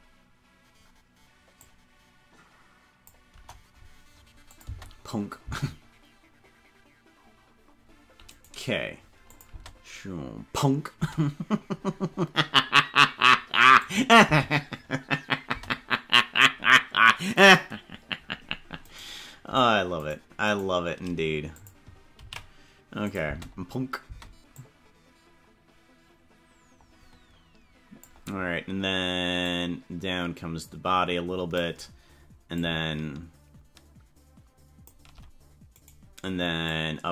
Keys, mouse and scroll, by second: 1.5-3.0 drag, 3.3 KP_0, 4.5 click, 4.6 space, 5.4 space, 8.4 right click, 9.3 click, 9.4 space, 10.9 space, 13.8 click, 14.2 space, 15.5 space, 18.9 right click, 20.0 shift+right click, 21.5 click, 22.2 ctrl+s, 23.0 click, 23.2 space, 24.2 space, 24.5-28.0 drag, 29.4-31.6 drag, 32.5 shift+click, 35.8 right click, 36.6-37.1 drag.